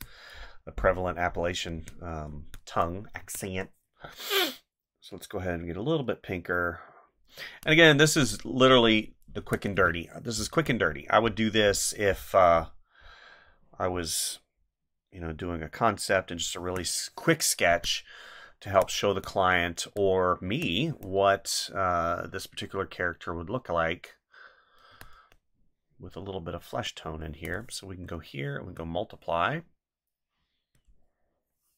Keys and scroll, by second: 1.8 space, 3.2 space, 9.4 space, 16.5 space, 18.6 space, 24.9 space, 27.3 space.